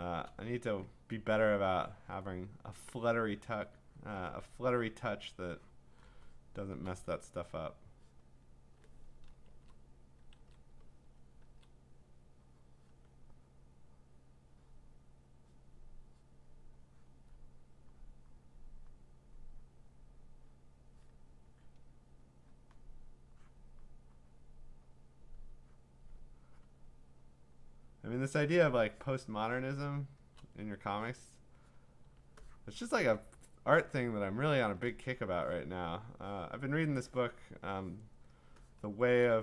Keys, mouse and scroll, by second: 0.0 click, 0.0 click, 0.0 click, 0.8 click, 2.1 click, 3.2 click, 4.0 click, 5.0 click, 5.9 click, 6.6 click, 6.6 click, 6.8 click, 6.9 click, 8.2 click, 8.7 click, 9.5 ctrl+z, 10.4 ctrl+z, 11.4 ctrl+z, 12.9 click, 14.9 click, 15.6 click, 16.4 click, 17.1 click, 18.4 click, 18.8 click, 18.9 click, 19.8 click, 20.7 click, 21.1 click, 22.3 click, 22.6 click, 23.8 click, 24.4 click, 25.2 click, 26.0 click, 26.6 click, 27.5 click, 28.5 click, 29.0 click, 30.2 click, 31.1 click, 31.7 click, 33.0 click, 34.0-37.2 drag, 34.1-34.9 typing, 36.6-37.4 typing, 38.3 click, 38.5-39.2 click, 38.7 click, 39.1 click.